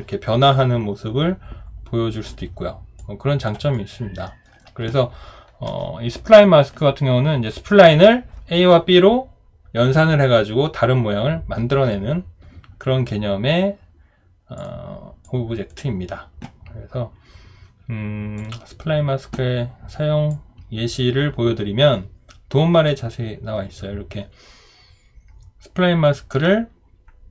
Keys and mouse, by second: 3.0 alt+click, 3.7 alt+right click, 4.3 alt+middle click.